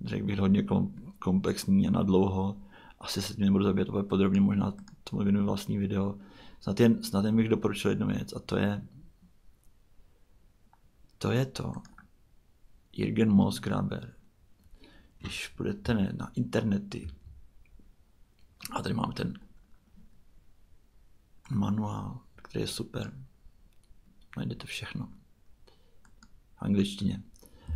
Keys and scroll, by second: 17.0 super+Tab, 27.7 super+w.